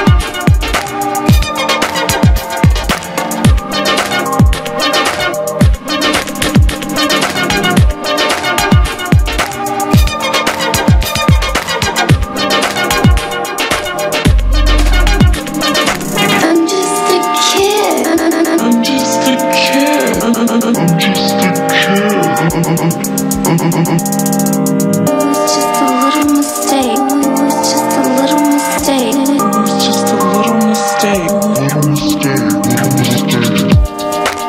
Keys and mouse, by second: 0.1 Down, 1.7 q, 2.1 click, 2.2 z, 2.6 click, 2.7 q, 4.1 q, 4.5-5.8 drag, 4.6 q, 6.2 q, 10.6 a, 11.0 middle click, 11.1 Tab, 11.5 middle click, 12.1 Tab, 12.6 q, 14.1 a, 14.9 a, 16.5 z, 16.5 z, 20.7 a, 23.0 z, 23.3 z, 24.7 s, 25.9 ctrl+a, 27.8-30.5 typing, 28.2 middle click, 32.0 g, 32.8 z, 33.3 middle click, 33.4 q, 34.0 Tab.